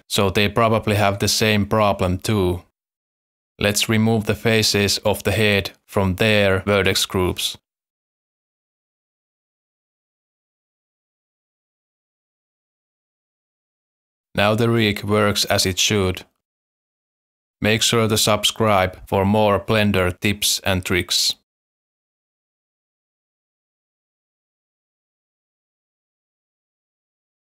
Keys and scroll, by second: 1.7 alt+a, 4.2 alt+a, 6.8 alt+a, 11.0 alt+a, 11.9 Tab, 14.3 r, 15.1 z, 15.8 r, 16.6 x.